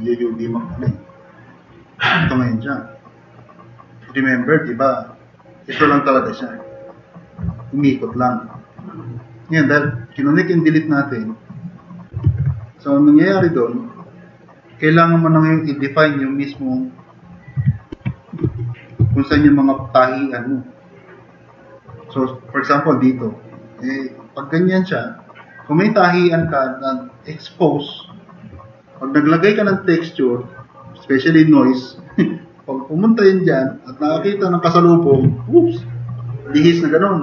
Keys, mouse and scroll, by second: 12.3 c, 17.9 2, 19.0 n, 19.3 d, 22.4-23.1 drag, 25.8 click.